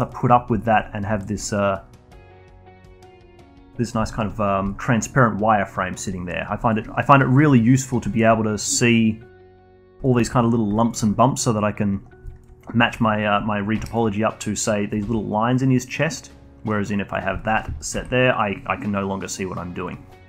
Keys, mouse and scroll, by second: 0.0-1.9 alt+drag, 2.1-3.1 alt+drag, 3.4 alt+click, 3.8 scroll down 1, 4.0-7.8 alt+drag, 8.1-9.3 alt+drag, 9.5 alt+click, 9.7-10.0 scroll up 1, 10.0-12.0 alt+drag, 12.0 scroll down 1, 12.2-12.7 alt+drag, 12.7 scroll up 1, 12.9-13.7 alt+drag, 13.7 1, 13.8 click, 14.3-14.6 scroll up 2, 15.0 g, 17.0 click, 17.3 alt+click, 17.9 g, 19.7 click, 20.0 scroll down 1.